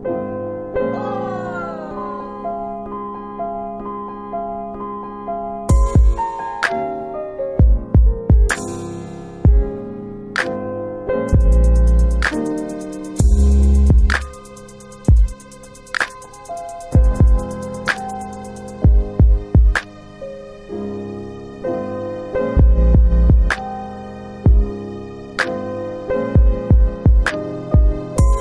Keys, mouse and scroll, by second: 2.7 click, 4.9 right click, 6.6 click, 8.7 ctrl+z, 10.1 click, 10.7 click, 12.3 click, 13.9 click, 14.1 click, 14.9-15.6 typing, 16.7 typing, 19.5 BackSpace, 20.0 BackSpace, 22.9 Return, 22.9 typing, 25.1 click, 28.0 click.